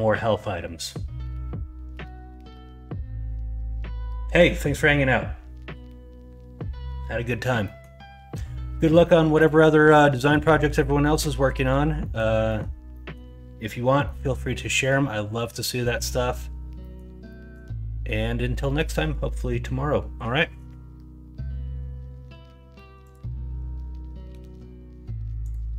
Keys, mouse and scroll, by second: 7.6 middle drag, 9.9 middle drag, 10.6 middle drag, 11.0 middle drag, 11.5 middle drag, 12.0 middle drag, 12.4 middle drag, 12.9 middle click, 14.0 middle drag, 14.7 middle drag, 15.3 middle click, 16.1 middle drag, 16.8 middle drag, 17.3 middle drag.